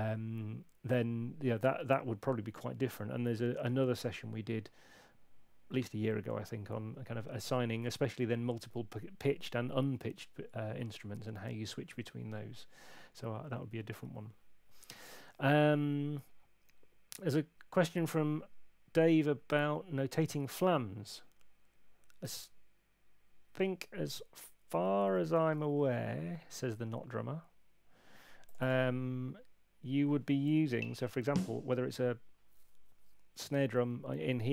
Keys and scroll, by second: 25.6 super+2, 30.7 Up.